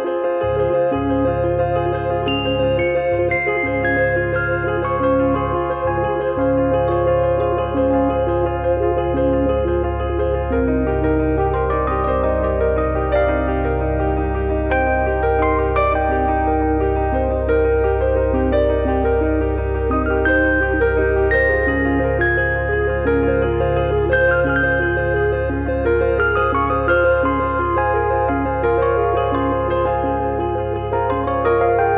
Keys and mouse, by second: 2.5 middle click, 2.7 middle click, 4.3 middle click, 5.5 click, 6.0 click, 9.0 click, 14.6 click, 16.0 click, 18.0 click, 20.4 click, 27.9 middle click, 28.9 click, 29.2 click, 30.0 e, 30.9 click.